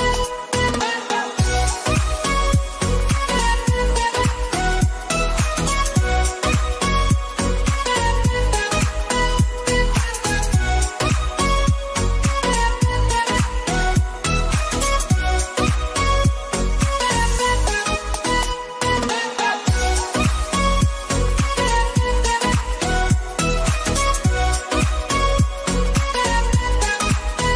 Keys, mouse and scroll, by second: 0.0-1.0 typing, 1.2 alt+Right, 3.7-6.8 drag, 10.8 click, 13.0 1, 15.1 7, 16.1 Return, 17.1 click, 19.1 click, 20.8 click.